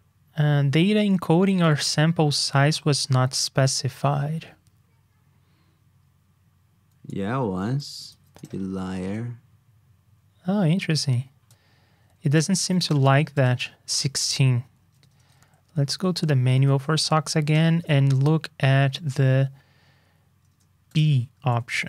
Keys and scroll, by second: 8.1 super+c, 8.6 super+v, 12.5 super+c, 13.0 super+v, 13.9 super+Tab, 16.3 shift+super+[, 17.7 super+Tab, 20.5 super+Tab, 21.7 super+Up.